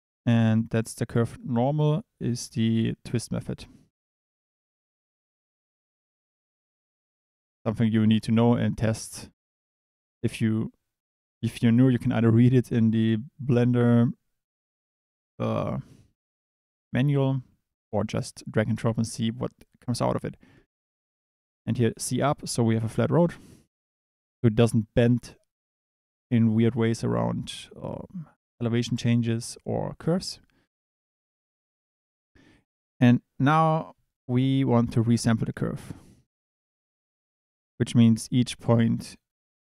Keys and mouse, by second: 6.9 click, 20.7-22.1 drag, 31.2 middle click, 32.4 click, 34.9 click.